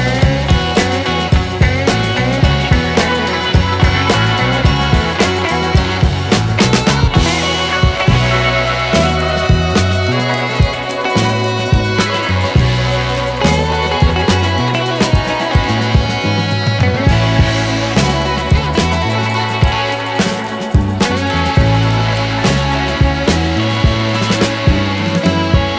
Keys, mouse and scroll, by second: 0.0 alt+right click, 0.3 alt+right click, 0.7 alt+right click, 3.4 alt+right click, 3.6 alt+right click, 4.1 alt+right click, 4.4 alt+right click, 5.0 alt+right click, 5.7 alt+right click, 6.9 alt+right click, 7.3 alt+right click, 7.4 alt+right click, 8.3 alt+right click, 8.7 alt+right click, 9.0 alt+right click, 11.4 alt+right click, 14.0 alt+right click, 14.9 alt+right click, 15.1 alt+right click, 15.5 alt+right click, 17.0 alt+right click, 17.2 alt+right click, 23.0 alt+right click, 25.2 alt+right click.